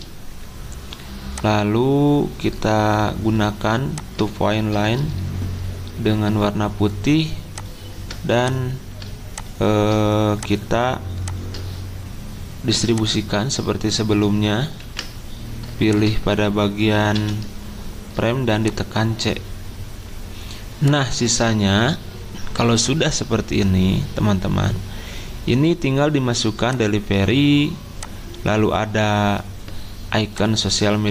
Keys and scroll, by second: 2.0-2.8 typing, 14.8 ctrl+g, 17.2 c.